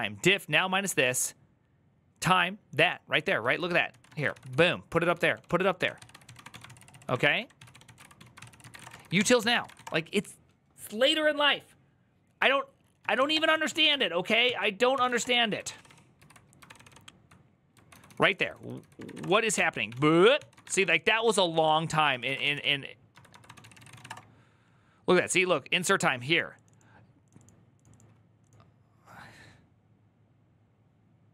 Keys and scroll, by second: 3.3 ctrl+c, 3.4-10.1 typing, 12.8-15.3 typing, 14.2 ctrl+t, 15.4 ctrl+d, 15.5 ctrl+d, 17.4-24.3 typing, 21.2 Up, 21.4 Up.